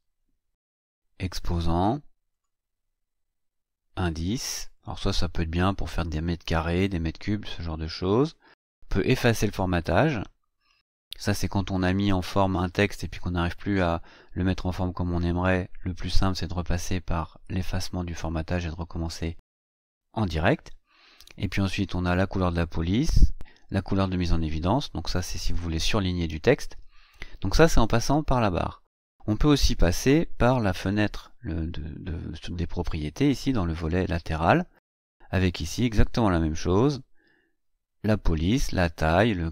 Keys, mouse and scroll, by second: 1.1 click, 2.3 click, 4.0 click, 4.7 click, 10.1-10.5 scroll up 2, 10.8-11.1 scroll up 2.